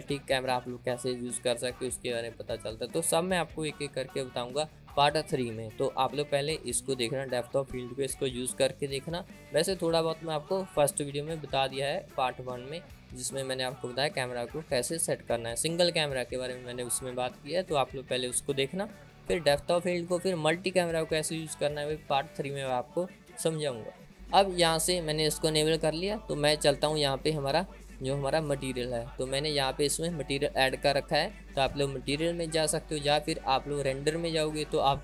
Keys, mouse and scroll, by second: 29.2 click, 34.9 click.